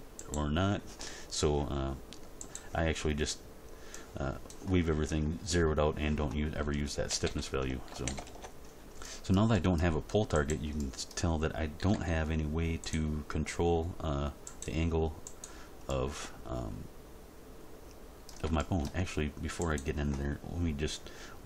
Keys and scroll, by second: 7.1 a, 7.9 alt+r, 8.1 alt+g, 8.3 alt+s, 11.8 r.